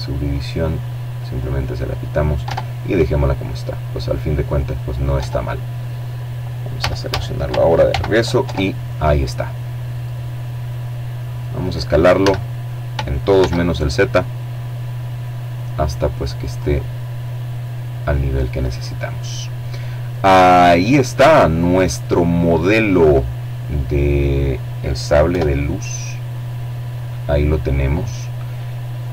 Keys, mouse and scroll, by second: 0.0 Tab, 2.7 Tab, 4.3 a, 5.4 ctrl+n, 6.0 ctrl+Tab, 7.0 middle click, 7.8-8.2 scroll down 2, 8.2 middle click, 8.4-9.0 scroll up 2, 9.7 s, 10.9 shift+z, 14.1 click, 16.1-17.1 scroll down 2, 16.3 middle click, 17.1 middle click, 17.8-18.1 scroll down 1, 18.1 middle click, 18.8 middle click, 19.7-20.1 scroll down 1, 20.1 middle click, 22.9 KP_7, 24.5-25.5 scroll up 2.